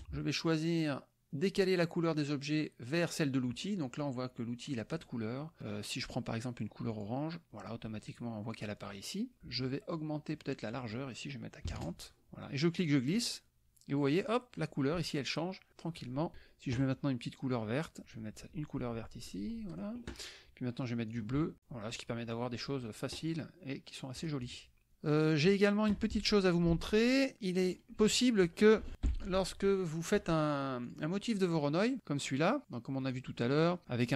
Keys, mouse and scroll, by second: 0.0 click, 6.9 click, 10.7 click, 11.7 KP_4, 12.7-14.8 drag, 15.7 click, 18.0-20.1 drag, 21.1 click, 21.6-23.1 drag, 24.2 click, 24.9 KP_Subtract, 25.1 click, 26.8 alt+Tab, 27.6 alt+click, 28.4 alt+click, 29.2 ctrl+shift+l, 30.8 click, 31.2 click, 32.0 click, 33.0 click, 33.4 click.